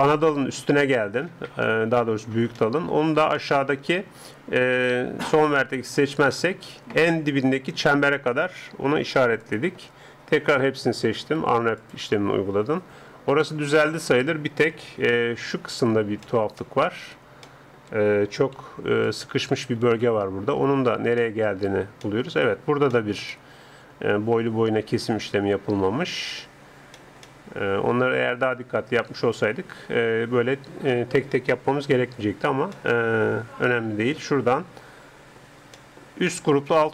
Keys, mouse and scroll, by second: 9.4-11.2 drag, 10.5 a, 10.7 a, 11.3 u, 14.7 a, 17.3-19.8 middle drag, 18.6 c, 21.2-25.3 middle drag, 26.7-28.8 middle drag, 31.7 a, 32.8-34.0 middle drag, 34.2 middle click, 34.4 scroll up 1, 35.7-36.9 middle drag.